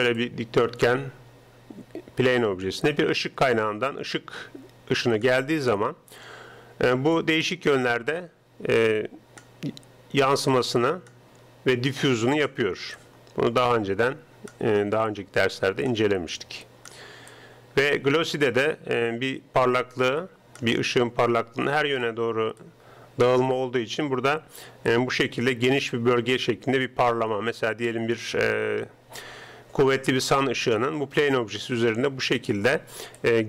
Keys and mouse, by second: 0.0-33.4 typing, 3.5-5.2 right drag, 7.2-14.7 drag, 14.7 middle click, 15.1-20.5 drag, 21.4-24.5 drag, 25.0-26.9 drag, 33.2-33.4 drag.